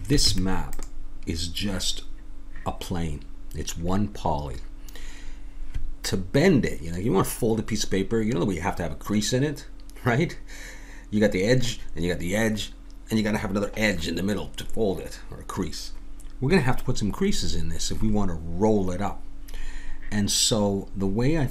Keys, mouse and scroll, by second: 0.2 Tab.